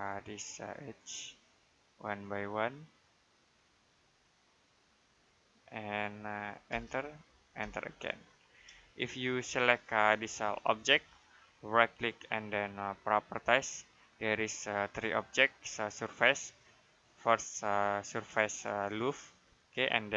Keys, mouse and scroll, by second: 6.5 space, 8.0 middle click, 8.7 middle click, 10.1 click, 11.5 right click, 13.0 click.